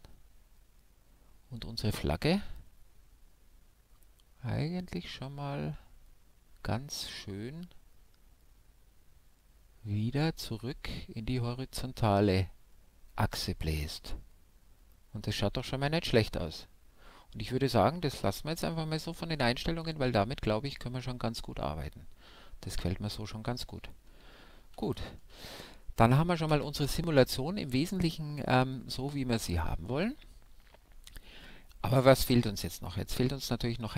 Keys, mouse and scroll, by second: 23.6 alt+a, 25.4 shift+Left, 26.8-28.6 middle drag, 30.4-31.1 scroll down 1, 31.1-33.9 middle drag.